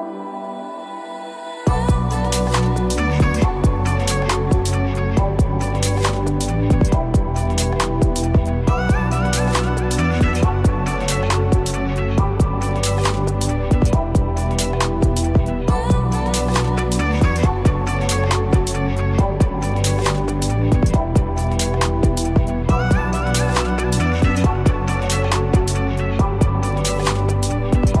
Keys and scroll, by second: 6.0 ctrl+-, 13.8 ctrl+=.